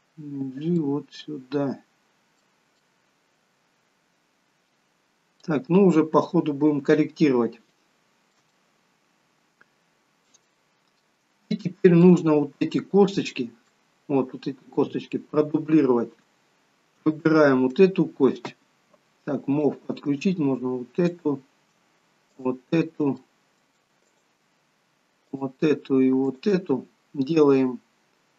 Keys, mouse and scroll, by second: 0.8 middle click, 2.7 middle click, 5.8-6.3 scroll down 2, 7.6 shift+middle click, 7.6 scroll down 3, 8.4 middle click, 10.8 scroll up 2, 11.4 shift+middle click, 13.7 middle click, 17.1 click, 19.4 click, 21.1 shift+click, 21.6 shift+click, 23.0 middle click, 24.0 shift+click, 25.2 shift+click.